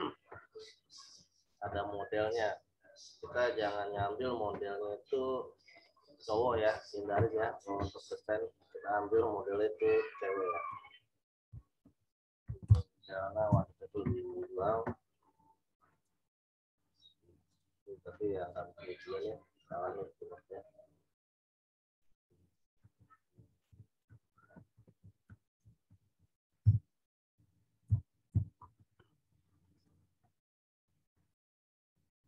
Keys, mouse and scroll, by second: 2.2 click, 5.7 click, 6.6-6.9 scroll up 1, 8.7-10.9 drag, 10.9-13.1 typing, 13.5 Return, 15.9 click, 18.3 scroll down 1, 19.3 scroll up 1, 21.8 v, 23.3-26.5 typing, 28.2 shift+d, 28.6 shift+k, 28.9 shift+Return, 30.7 scroll down 1.